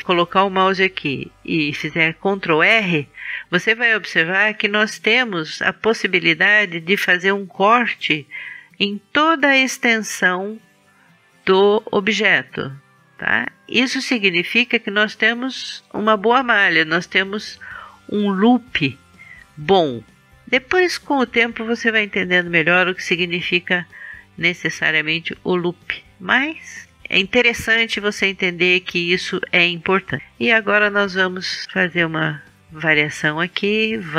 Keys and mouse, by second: 2.0 ctrl+r, 31.6-32.9 drag.